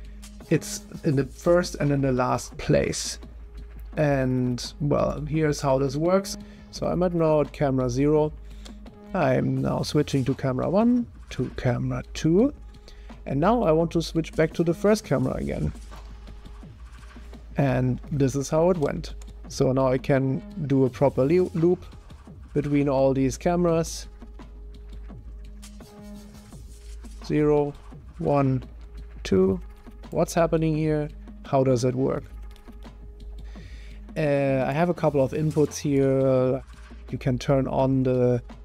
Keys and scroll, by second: 8.9 0, 11.3 0, 15.7 0, 18.9 0, 20.2 0, 21.7 0, 29.6 0, 30.7 0, 32.0 0.